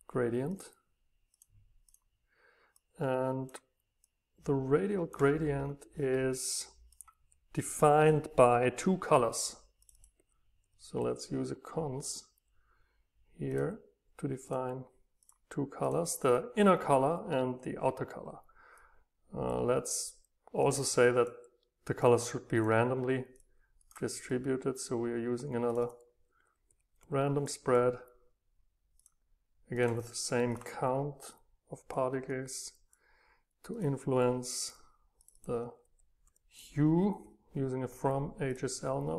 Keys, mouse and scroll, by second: 2.7 right click, 2.9-5.6 drag, 5.6-6.2 scroll up 2, 6.2 middle drag, 6.4 middle click, 6.6-8.8 middle drag, 10.2-12.0 drag, 20.6 drag, 21.0 click, 21.2-22.3 drag, 23.3-23.8 drag, 23.8 right click, 29.1-37.4 drag.